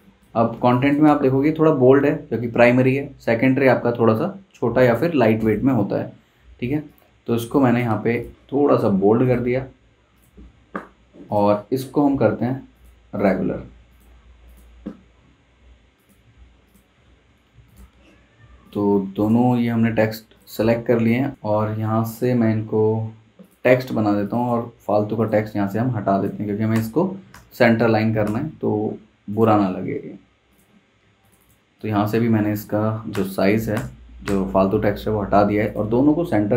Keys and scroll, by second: 0.5 z, 1.1 v, 26.7 BackSpace, 27.3 BackSpace, 28.2 BackSpace, 28.5 Escape, 33.1 BackSpace, 33.7 BackSpace, 34.2 BackSpace, 34.7 Escape.